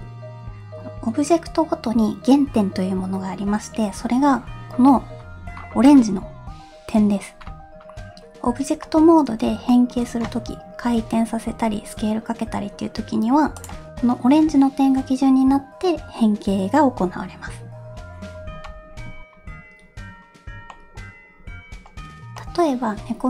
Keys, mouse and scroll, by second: 4.9-7.0 scroll up 4, 7.0-7.4 scroll up 1, 7.4-8.8 scroll down 3, 8.8 middle click, 9.6-10.8 shift+middle drag, 10.8 r, 13.9 middle click, 14.0 scroll up 1, 14.3-18.0 scroll down 1, 19.2 middle click, 19.2 scroll down 1, 20.8 middle click, 22.4 middle click, 23.0-23.2 scroll down 1.